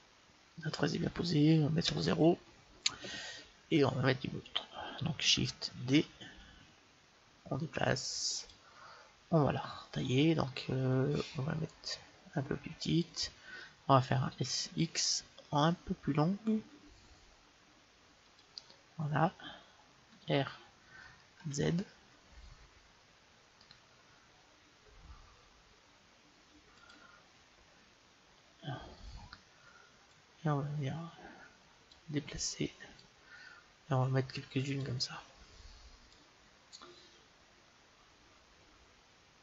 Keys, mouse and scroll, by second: 1.7 KP_0, 6.2 shift+d, 10.1 s, 14.4 s, 20.3 r, 27.0-28.6 drag, 30.3-32.1 drag, 33.2-35.0 drag, 36.2-37.9 drag.